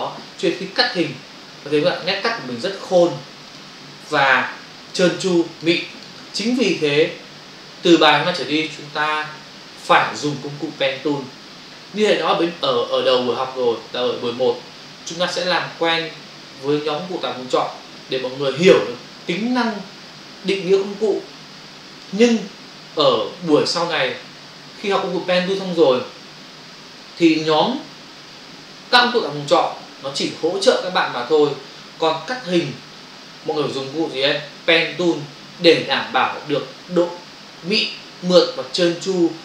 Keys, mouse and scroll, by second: 2.9 ctrl+click, 3.5 ctrl+click, 4.1 ctrl+space, 5.2 space, 5.9 ctrl+click, 6.4 click.